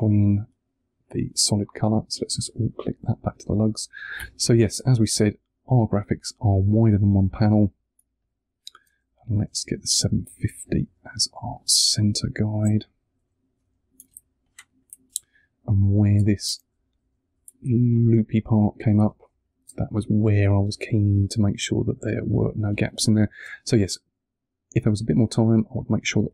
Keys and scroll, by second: 4.1 v, 7.0 space, 9.2 shift+Left, 13.5 Down, 14.0 space, 15.0 super+space, 16.8 shift+Up, 19.0 space, 22.6 space, 26.0 space.